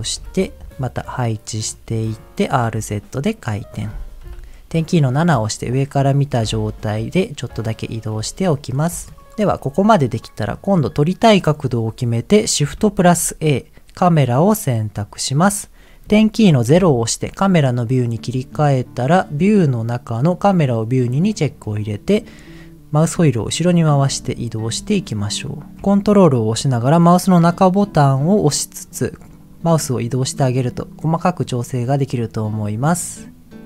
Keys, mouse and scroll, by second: 0.1 KP_1, 0.7 click, 0.7 g, 1.5 click, 1.9 middle click, 2.4 r, 2.6 z, 3.4 click, 4.3 KP_7, 6.4 g, 7.7 click, 8.1 r, 8.9 click, 9.1 middle click, 9.5 shift+middle click, 10.1 middle click, 12.3 scroll up 1, 12.9 shift+a, 16.7 KP_0, 19.4 click, 21.1 click, 22.9 scroll down 1, 23.5 scroll down 1, 24.9 shift+middle click, 24.9 scroll down 1, 27.8 ctrl+middle click.